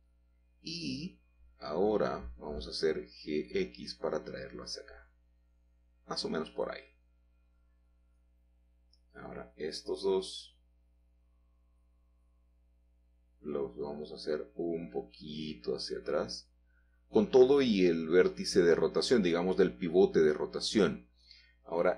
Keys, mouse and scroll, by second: 2.1 click, 3.7 g, 4.1 x, 7.6 click, 8.3 shift+click, 10.6-11.0 scroll down 2, 11.2 middle click, 11.5-11.9 scroll down 2, 13.2 scroll up 2, 14.7 g, 15.5 x, 18.9 click, 20.0 middle click, 20.5-21.3 scroll up 2, 21.4-21.9 scroll up 1.